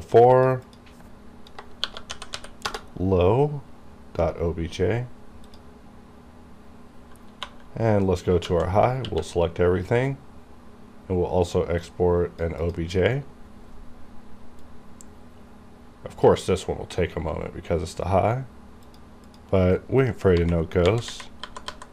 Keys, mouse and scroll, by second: 0.7 click, 1.9-2.6 typing, 2.7 Return, 5.5 click, 5.6 click, 7.5-9.1 typing, 11.9-18.9 drag, 18.9 click, 20.4 Right.